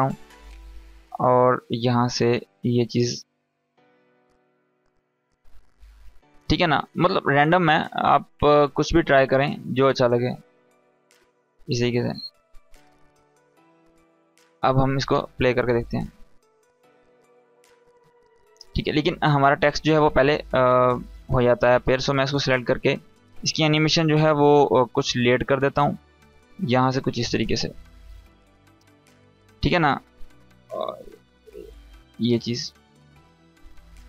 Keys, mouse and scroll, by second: 7.2 space, 10.4 space, 10.9-11.5 click, 11.4 space, 13.5 click, 13.8 scroll down 1, 14.7-15.3 click, 15.1 space, 17.7 space, 18.3-19.8 drag, 33.1 space.